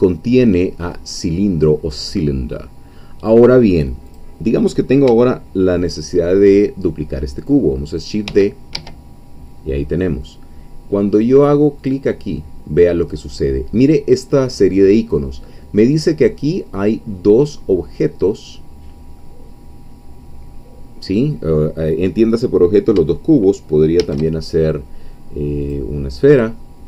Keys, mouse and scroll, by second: 4.2 click, 8.3 shift+d, 8.8 Escape, 11.9 click, 24.0 shift+a, 25.6 click.